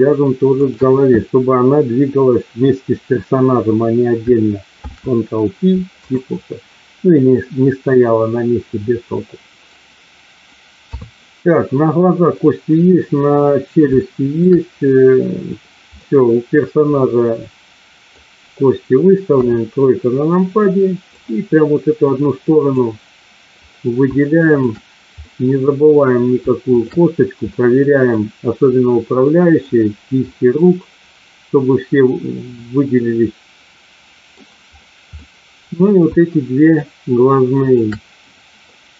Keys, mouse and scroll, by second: 0.6 shift+click, 4.6 ctrl+p, 7.4-9.7 middle drag, 10.7 KP_3, 13.9 shift+middle click, 16.0-18.1 middle drag, 19.2 KP_1, 21.1-22.7 drag, 24.4 shift+click, 25.2 middle click, 26.6 shift+click, 27.5 middle click, 29.2 middle click, 30.2-34.4 middle drag, 35.2 middle click, 37.7 shift+click, 38.7-38.9 middle drag.